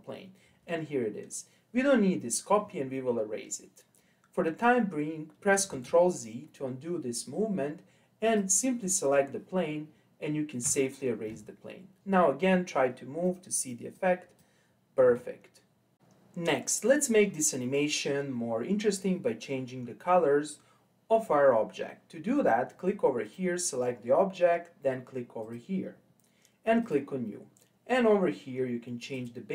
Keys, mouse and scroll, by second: 5.7 ctrl+z, 8.3 click, 10.7 Delete, 13.2 click, 14.0 click, 15.1 ctrl+z, 22.3-23.3 drag, 25.4 click, 26.8-29.2 drag.